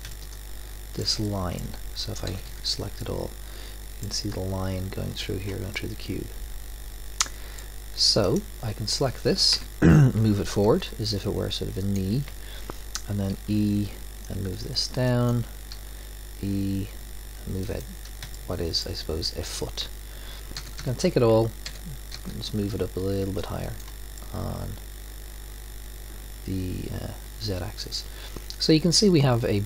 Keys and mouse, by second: 2.3 a, 2.5 a, 7.6-8.7 middle drag, 9.5 KP_3, 10.7 g, 13.3 e, 15.7 e, 18.3 click, 20.6 a, 20.8 a, 21.7 g, 24.2-24.8 drag, 24.9 drag, 25.2 middle click.